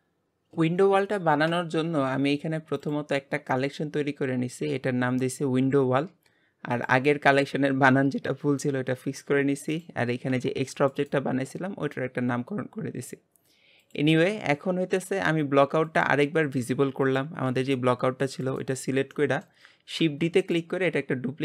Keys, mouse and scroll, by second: 2.9-5.7 drag, 6.7 click, 9.7 click, 10.3 g, 13.8 click, 15.8 click, 17.0 click, 17.5 g, 18.8-20.0 middle drag, 18.8 scroll down 1, 20.0 shift+d.